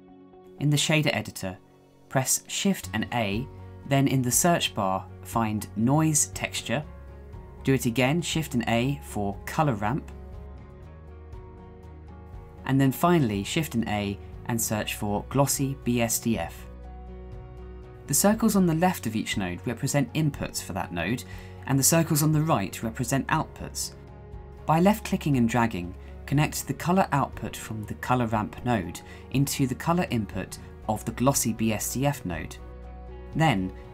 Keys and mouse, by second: 2.3 shift+a, 7.1 click, 7.6 shift+a, 13.9 click, 14.5 shift+a, 16.7 s, 24.8-26.2 drag.